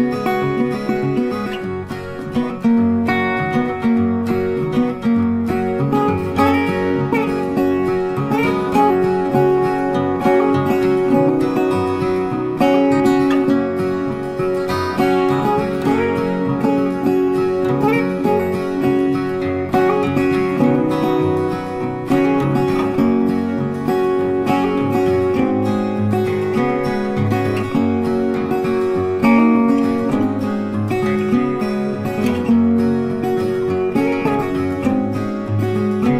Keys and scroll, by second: 16.9 ctrl+t.